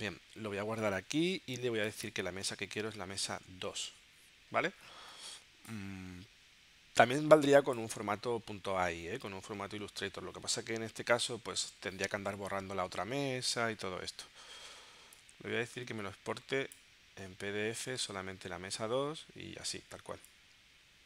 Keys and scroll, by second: 2.7 2, 3.4 Tab.